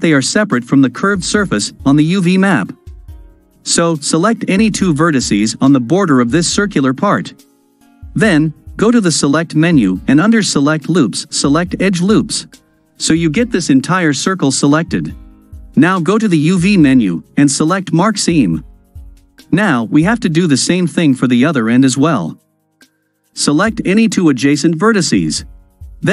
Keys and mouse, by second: 2.6-3.6 ctrl+drag, 5.2 click, 6.6 shift+click, 7.4 ctrl+click, 7.5 ctrl+middle click, 8.9-12.0 drag, 16.5-18.2 drag, 19.8 click, 20.5-21.5 middle drag, 25.9-26.1 drag.